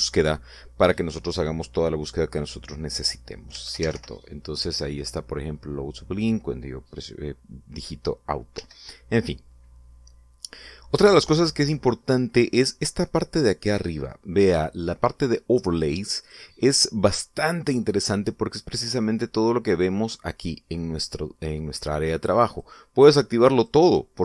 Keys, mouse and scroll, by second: 4.3 a, 4.5 u, 4.7 o, 9.3 Escape, 17.0 click, 22.9 click, 23.3 click.